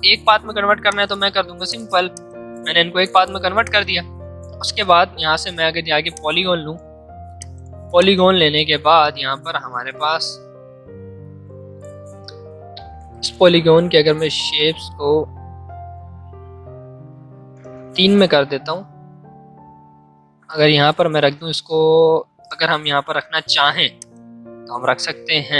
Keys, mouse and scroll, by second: 0.8-10.9 drag, 10.9 space, 13.3 Up, 19.9 space, 22.3 space, 23.0 v, 23.9-25.5 alt+drag.